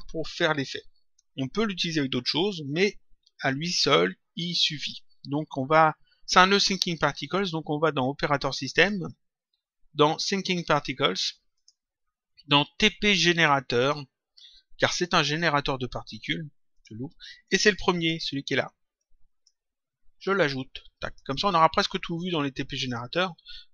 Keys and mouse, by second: 8.6 click, 10.1 click, 11.5 click, 13.7 click, 16.6 click, 17.9 click, 20.2 click, 22.1 click.